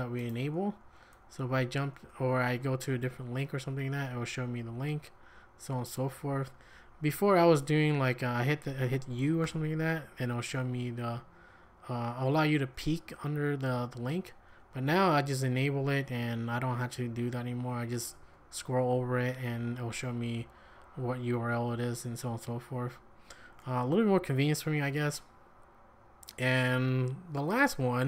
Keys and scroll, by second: 0.9-4.1 typing, 5.1-7.4 typing, 9.4 typing, 14.3 j, 14.6 j, 14.8 j, 15.1 j, 16.2-20.8 typing, 22.0 k, 22.7 k, 23.1 k.